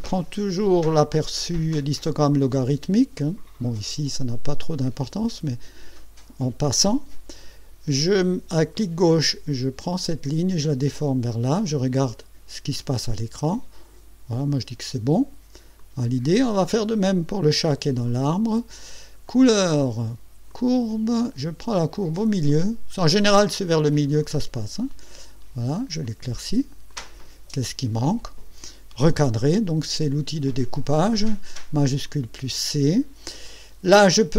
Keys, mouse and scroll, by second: 3.2-5.8 drag, 8.8-14.9 drag, 15.8 click, 18.1 click, 19.3 click, 20.5 click, 22.5-26.1 drag, 26.9 click, 32.0 click.